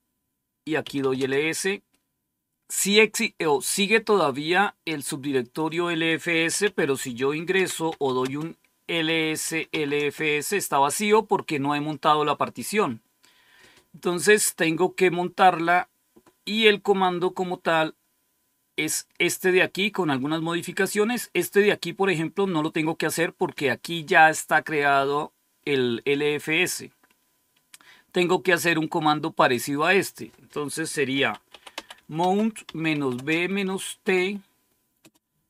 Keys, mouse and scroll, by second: 0.5-2.4 typing, 4.1-5.4 drag, 5.5 click, 6.6-10.1 typing, 13.7-14.8 scroll down 1, 14.8-21.0 scroll up 2, 21.0-22.2 drag, 29.2 click, 29.9 click, 30.5 click, 31.1-34.9 typing.